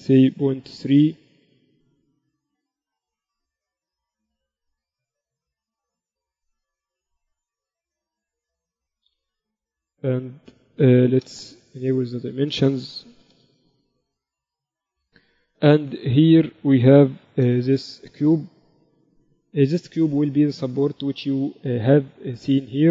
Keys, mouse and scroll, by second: 3.9 ctrl+a, 7.3 KP_Decimal, 10.5-12.8 drag, 12.9-14.8 drag, 16.9-18.7 drag, 19.2 n, 21.2-22.9 drag.